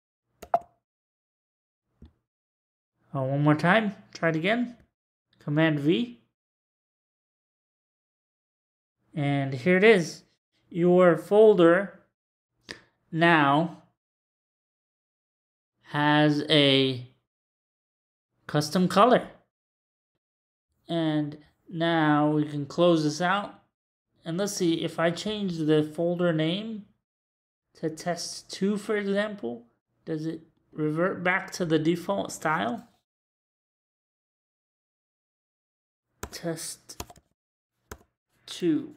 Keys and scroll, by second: 0.4 super+v, 6.8 super+v, 36.2-37.9 typing.